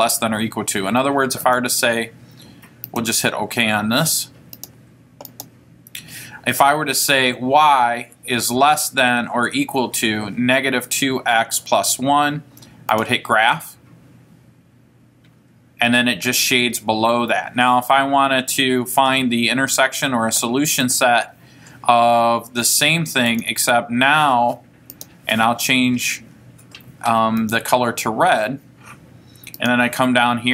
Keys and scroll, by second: 4.7 Return, 5.5 Return, 22.8 Left, 23.5 Left, 25.1 Return, 27.5 Right, 29.7 Down.